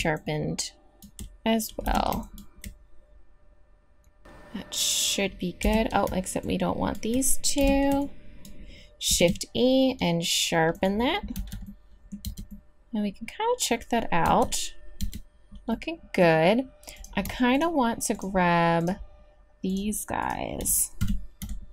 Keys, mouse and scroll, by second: 1.8 b, 5.6 b, 7.6 b, 9.1 shift+e, 11.3 z, 12.3 Tab, 14.5-15.0 middle drag, 15.0 Tab, 21.0 KP_3.